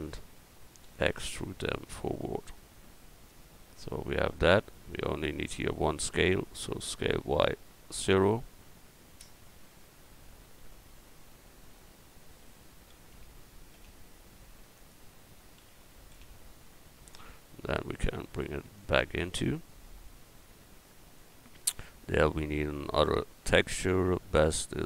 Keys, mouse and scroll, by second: 0.8 e, 1.8-4.0 drag, 7.0 s, 15.6 s, 18.0-20.9 drag, 23.4 a.